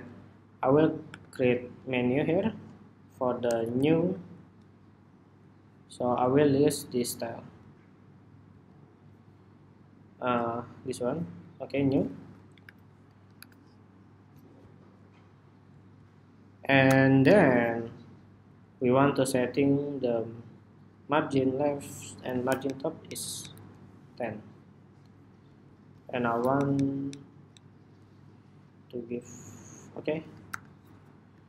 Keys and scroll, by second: 4.9 Escape, 13.6 super+-, 16.5 super+-, 17.0 super+=, 22.4 alt+Down, 22.8 alt+Down, 23.2 alt+Down, 26.5 alt+Down, 26.8 alt+Down, 27.2 alt+Down, 28.5 alt+Down, 31.2 super+-.